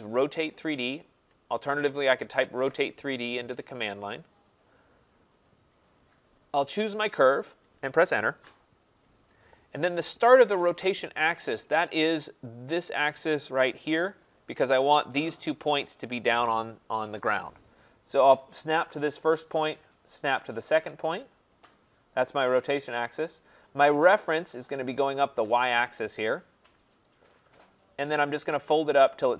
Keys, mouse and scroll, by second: 0.9 click, 6.0 click, 8.4 Return, 19.3 click, 21.2 click, 27.4 click.